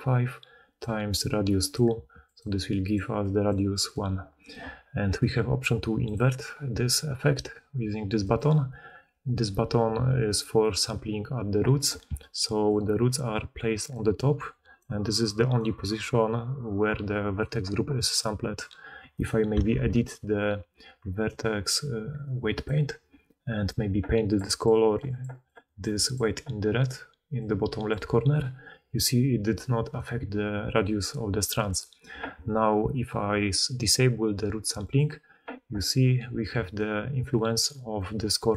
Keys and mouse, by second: 0.0-4.4 typing, 8.1 click, 12.0-15.8 d, 12.5-34.8 drag, 14.7-19.1 middle drag, 19.6 ctrl+Tab, 29.7 right click, 31.6 middle click, 31.6 right click, 34.8-38.5 middle drag, 36.4-38.5 typing, 36.6-38.5 drag.